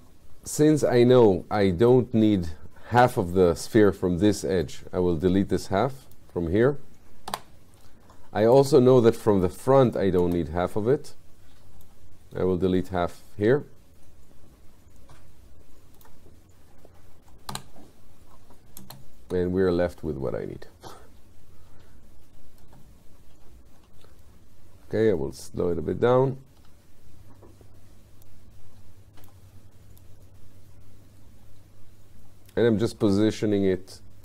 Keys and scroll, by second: 7.3 Delete, 17.5 Delete, 22.7 space, 26.1 F8.